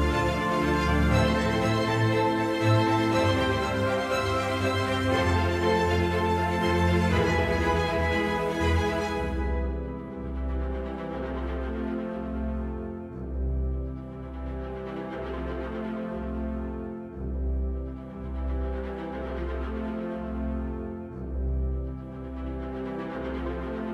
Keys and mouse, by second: 1.3 shift+click, 2.6 shift+click, 4.5 shift+click, 5.3 middle click, 6.9 shift+click, 9.1 middle click, 10.7-11.6 shift+drag, 12.3-13.2 middle drag, 13.2 right click, 13.9 shift+click, 15.6 shift+click, 16.1-17.2 middle drag, 17.2 right drag, 19.1 shift+click, 19.8 shift+click, 21.5 shift+click, 22.1-23.1 middle drag.